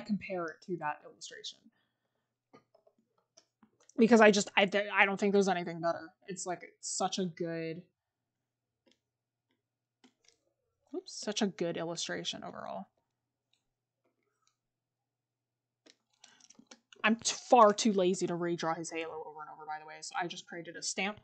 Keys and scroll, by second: 0.2 scroll, 2.8 scroll up 1, 3.2 scroll, 4.1 scroll up 1.